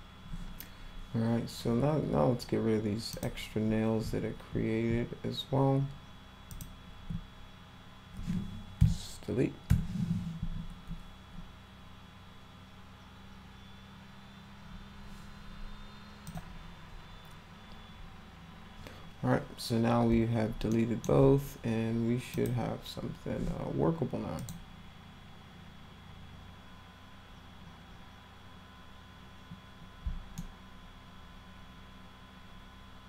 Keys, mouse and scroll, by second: 3.1 click, 4.0-4.6 ctrl+scroll up 1, 6.5 ctrl+click, 16.2 click, 20.7 alt+middle click, 22.3 click, 24.3 click, 30.3-33.0 alt+middle drag.